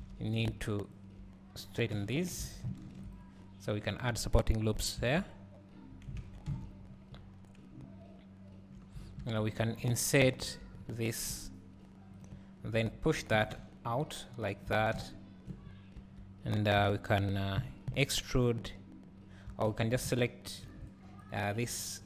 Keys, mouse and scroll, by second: 0.0 alt+a, 0.4 click, 0.9 shift+click, 2.0 j, 2.5 alt+a, 2.9 ctrl+r, 6.9 scroll up 1, 7.4 scroll down 1, 7.8 `, 9.0 scroll down 1, 9.2 Tab, 9.6 3, 10.0 click, 10.4 shift+click, 12.2 click, 12.4 `, 13.4 g, 14.7 click, 14.9 Tab, 15.0 `, 15.7-16.0 scroll up 2, 16.0 Tab, 16.8 a, 17.6 KP_3, 19.6 1, 20.1 `, 21.3 alt+click.